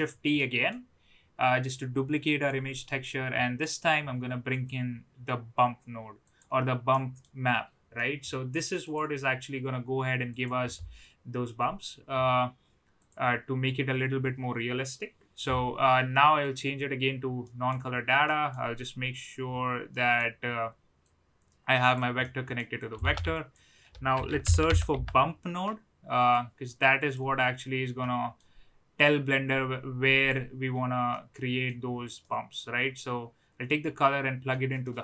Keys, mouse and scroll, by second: 0.3 middle click, 2.2 click, 6.9 middle click, 8.0 middle click, 9.0-10.0 drag, 10.4 click, 13.1-16.6 drag, 17.6 middle click, 18.2 middle click, 19.9 middle click, 21.2-21.9 drag, 22.4 middle click, 22.8 click, 23.0 shift+a, 27.9 middle click, 29.0-30.2 drag, 31.1-31.6 middle drag, 32.1 middle drag, 34.7 middle click.